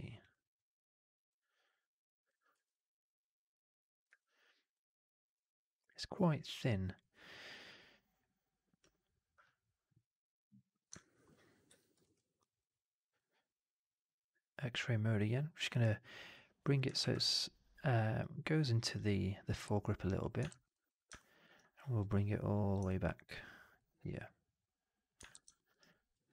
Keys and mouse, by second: 0.1 click, 4.0 w, 9.8 click, 10.9 alt+middle click, 11.1 alt+right click, 11.6 1, 11.9 shift+x, 12.3 click, 13.0-16.6 drag, 16.9 shift+x, 19.9 click, 20.4 shift+x, 21.0 alt+middle click, 21.9 click, 22.7 middle click, 23.6-25.1 drag, 25.2 shift+x, 25.4 alt+middle click, 25.7 alt+right click, 26.2 4.